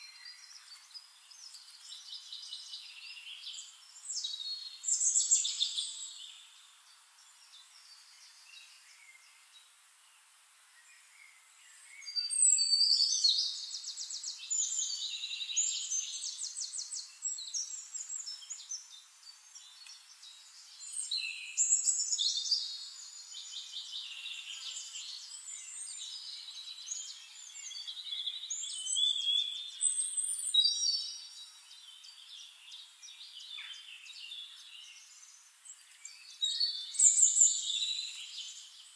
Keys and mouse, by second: 1.8 click, 3.1-6.4 ctrl+shift+drag, 5.0 t, 5.8 ctrl+a, 6.5-7.8 drag, 7.6 m, 7.8 o, 8.0 n, 9.8 click, 11.7-15.2 drag, 15.7 ctrl+d, 16.2-17.9 ctrl+drag, 18.3 t, 18.8 ctrl+click, 19.2 ctrl+a, 21.0 Caps_Lock, 21.3 Caps_Lock, 21.8 b, 22.0 o, 22.5 r, 23.9-26.5 typing, 28.1 ctrl+a, 30.1-32.5 drag, 33.3-35.4 drag, 35.5-38.9 drag, 38.6-38.9 right drag.